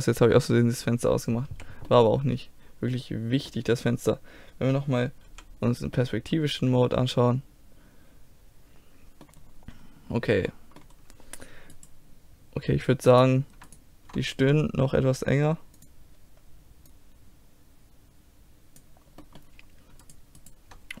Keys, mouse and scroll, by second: 1.5 z, 1.9 middle click, 4.9-6.0 middle drag, 5.3 KP_5, 6.4-7.8 middle drag, 9.5-11.0 middle drag, 11.7-15.6 right drag, 15.8-18.8 drag, 19.2 middle click, 20.0 right click, 20.9-21.0 drag.